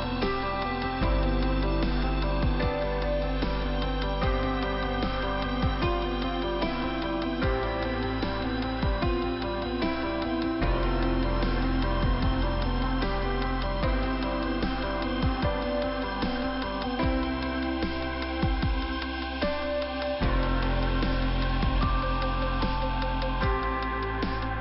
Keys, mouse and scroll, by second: 1.1 click, 4.0 scroll up 2, 4.6 middle click, 5.5 scroll up 1, 8.1 click, 10.9 click, 13.5 middle click, 17.0 click, 19.7 click, 23.4 click, 23.4 click.